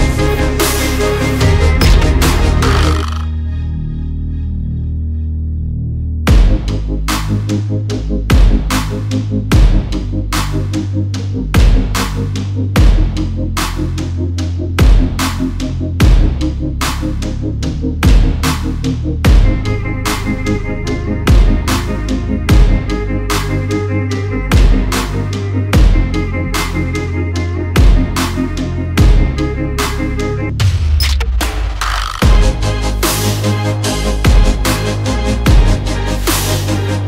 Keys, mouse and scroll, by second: 0.8 right click, 1.7 click, 3.7 click, 10.8 alt+click, 12.1 click, 13.0 alt+click, 14.1 click, 20.5 ctrl+z, 20.6 click, 21.7 8, 21.9 6, 22.4 click, 24.9 alt+scroll down 1, 25.2 alt+scroll up 1, 25.7 alt+scroll down 1, 27.4 shift+Up, 27.6 shift+Up, 27.8 shift+Up, 27.9 shift+Up, 28.0 shift+Up, 28.1 shift+Up, 28.3 shift+Up, 28.4 shift+Up, 28.6 shift+Up, 28.7 shift+Up, 29.7 shift+Up, 30.1 shift+Down, 31.1 click, 31.7 shift+Up, 31.9 shift+Up, 32.0-32.5 shift+Up, 32.7 shift+Up, 34.1 alt+scroll up 1, 34.3 alt+scroll down 2, 34.9 alt+click, 35.5 alt+shift+scroll up 1, 36.6 click.